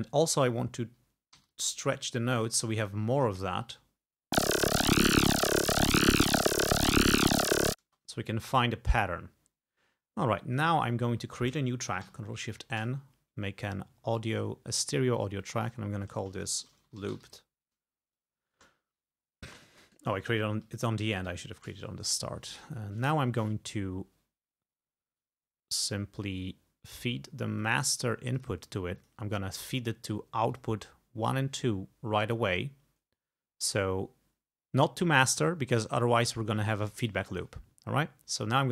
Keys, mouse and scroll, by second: 0.0 ctrl+scroll up 2, 1.4 t, 1.5-2.8 drag, 3.7 click, 3.9 space, 5.1 g, 5.5 ctrl+scroll down 2, 6.3 ctrl+scroll up 2, 7.9 space, 9.5-9.8 scroll up 2, 10.6 click, 12.1 ctrl+shift+n, 14.6 scroll down 2, 15.5 click, 16.4-17.8 typing, 18.6 Return, 19.8 ctrl+Up, 21.3 ctrl+Down, 27.6 click, 28.4 click, 29.0 click, 30.5 click.